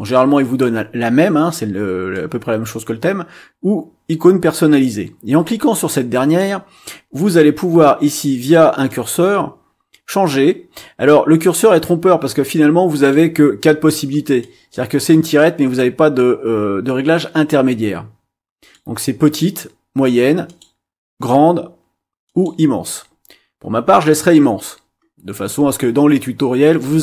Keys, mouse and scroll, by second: 2.1-6.6 drag, 8.8-13.3 drag, 14.4 click, 15.1-18.9 drag, 20.4 click, 22.2 click.